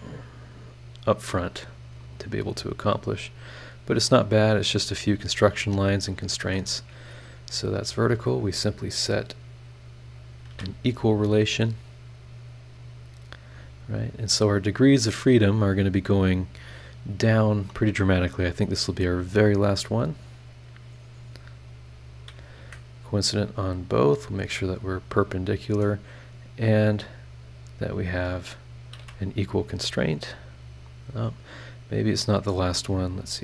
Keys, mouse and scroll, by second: 0.9 scroll up 1, 1.2 scroll down 1, 1.6-1.9 scroll up 1, 3.3 click, 4.7 click, 6.0 click, 6.4 Escape, 6.7 scroll up 2, 7.8 click, 8.1 scroll down 2, 10.2 click, 10.5 e, 10.9 scroll down 2, 11.3-11.8 scroll up 4, 12.8-15.5 drag, 15.6 scroll down 2, 16.0-16.6 scroll up 4, 19.0 click, 19.9 click, 22.2 click, 22.6 Escape, 23.3 click, 23.7 click, 24.9 click, 25.6 click, 25.9-26.6 scroll down 4, 27.1 scroll up 2, 28.7 click, 29.0 e, 29.4-30.1 scroll down 2, 30.7-31.3 scroll up 2, 32.1 click, 33.2 click.